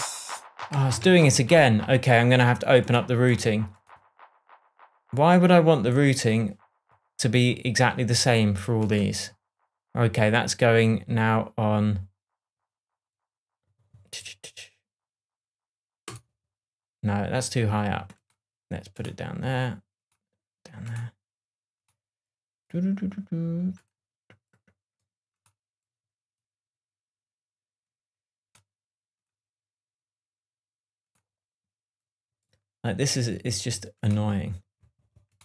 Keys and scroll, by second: 1.0 shift+Tab.